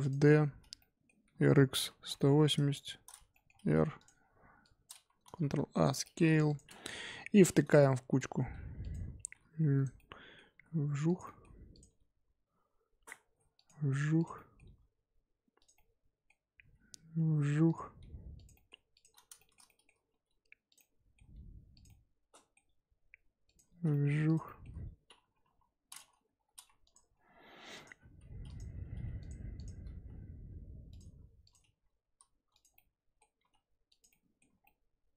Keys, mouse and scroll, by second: 0.8-1.2 middle drag, 1.2 r, 2.8-3.3 scroll up 4, 3.3 middle drag, 3.5 r, 4.2-4.6 scroll down 5, 4.6 click, 5.2 ctrl+a, 6.0 shift+middle drag, 6.2 scroll up 2, 6.4 click, 6.9 KP_7, 7.7 g, 9.2 g, 9.9-10.5 middle drag, 10.5 g, 11.2-11.7 middle drag, 11.7 click, 11.8 g, 14.1 click, 14.3 middle drag, 14.6 g, 15.7-16.6 middle drag, 16.6 g, 18.0 g, 18.5-18.9 middle drag, 18.9 click, 19.3-20.1 shift+middle drag, 20.1 g, 20.7-21.3 middle drag, 21.3 g, 21.8-22.7 middle drag, 22.7 g, 23.9 middle drag, 24.1 scroll down 1, 24.2 click, 24.4-25.4 middle drag, 25.4 KP_7, 25.8 click, 26.3 g, 27.1 s, 28.0 g, 29.2 click, 29.5 click, 29.9 g, 31.4 click, 31.7 g, 32.7-33.4 middle drag, 33.4 g, 34.1-34.6 middle drag, 34.6 scroll down 1, 34.6-35.1 middle drag.